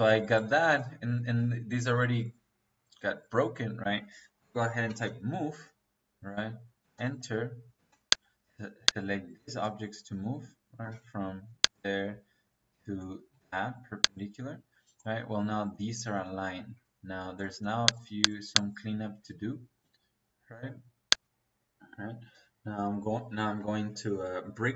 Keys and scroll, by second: 3.7 Escape, 4.4-5.0 typing, 6.7 space, 7.7 -, 10.7 -, 16.0 Escape, 19.0 Escape.